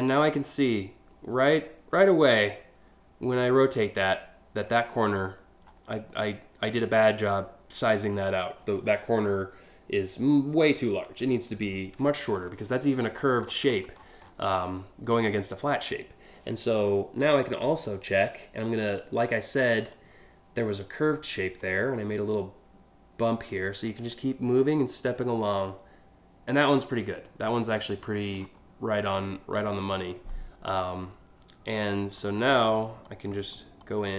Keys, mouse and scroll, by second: 4.8 alt+scroll up 3, 5.3 alt+scroll up 1, 8.4 scroll down 1, 11.6-12.1 alt+scroll down 2, 12.8-14.3 scroll up 8, 16.5-19.5 drag, 21.2-22.8 drag, 23.7-26.8 drag, 27.2 scroll down 3, 27.6-28.1 alt+scroll up 3, 30.3 click, 31.4 click, 31.8 click, 32.4 ctrl+drag, 33.2 drag.